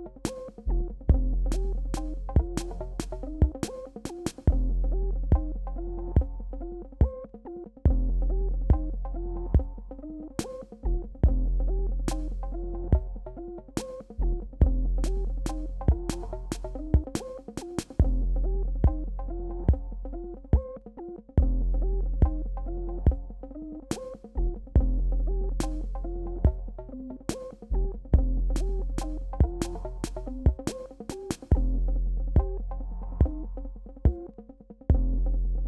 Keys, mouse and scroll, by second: 4.3 ctrl+click, 5.0-5.6 alt+scroll up 2, 8.6 alt+scroll down 1, 11.4 ctrl+Num_Lock, 11.4 alt+scroll down 1, 11.9 ctrl+d, 12.7-15.0 drag, 14.9 Left, 18.0 ctrl+click, 19.5 ctrl+d, 20.6 click, 26.2 b, 26.9-31.2 drag, 31.2 space, 31.6 click, 31.7 space, 35.2 space, 35.4-35.6 alt+scroll down 2.